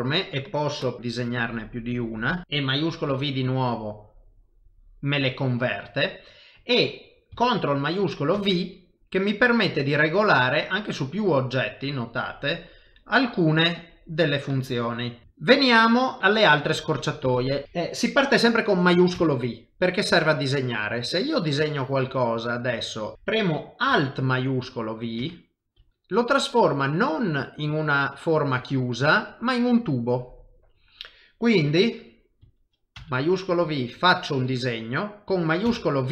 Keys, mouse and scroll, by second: 0.8-2.5 click, 3.5 shift+v, 4.4 middle click, 5.3 shift+middle click, 8.3 ctrl+shift+v, 14.9 middle click, 15.2 shift+middle click, 15.2 ctrl+middle click, 15.8 middle click, 16.2 shift+middle click, 16.9 middle click, 17.5 shift+middle click, 20.8 click, 26.3 middle click, 29.3 middle click, 31.4 middle click, 33.0 shift+v, 33.6 click, 35.8 shift+v.